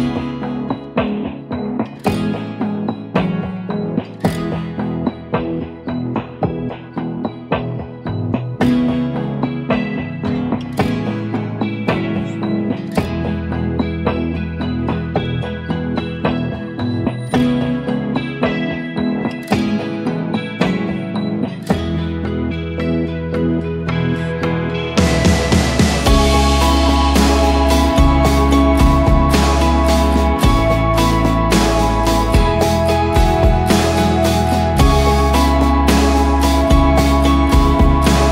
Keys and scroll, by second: 0.0-0.2 typing, 1.3-3.0 typing, 4.7 ctrl+a, 5.1-5.8 typing, 13.1 Left, 13.2 e, 13.3 Return, 14.8 v, 15.6 ctrl+d, 16.1 shift+Up, 16.4 shift+Up, 17.3 shift+Up, 18.5 ctrl+[, 25.0-27.8 typing, 29.0 ctrl+[, 29.2 ctrl+], 29.6 ctrl+], 30.8 v, 31.4 ctrl+d, 31.7 shift+Up, 31.7 shift+Up, 34.2 Return, 35.2-36.5 typing, 37.3 ctrl+g, 37.9-38.3 typing.